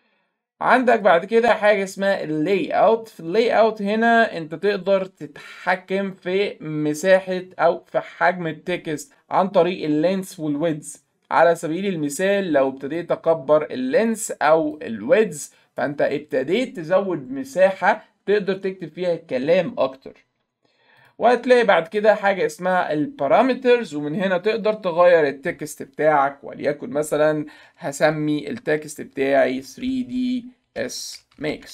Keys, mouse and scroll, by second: 0.9 click, 1.9 click, 11.6 middle click, 11.6-12.0 scroll down 2, 11.8 middle click, 13.0-14.1 drag, 14.8-15.8 drag, 21.0 click, 21.9 click, 24.6 click, 29.6-31.7 typing.